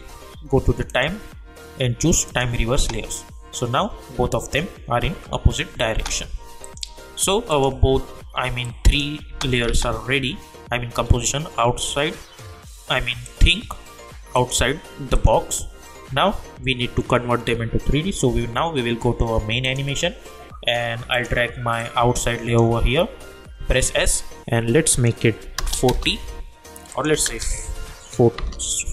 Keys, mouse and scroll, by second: 0.9 click, 2.7 space, 5.9 space, 6.6 click, 9.3 space, 13.2 click, 19.6-23.6 drag, 23.6 s, 24.9 click, 25.8 Return, 26.9 click, 28.4 Return.